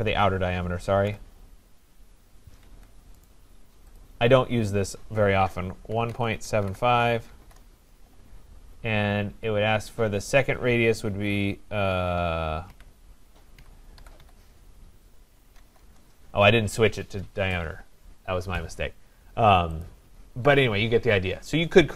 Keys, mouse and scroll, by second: 0.8-1.6 typing, 2.7 Escape, 3.3 right click, 4.0 click, 5.7-7.3 typing, 7.5 Return, 12.7-16.1 typing, 19.8-21.0 drag.